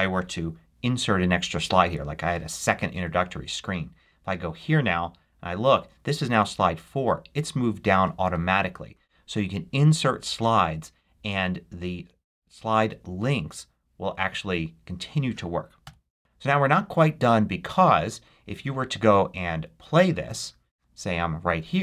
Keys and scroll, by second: 1.7 super+d, 8.1 Escape, 15.7 BackSpace.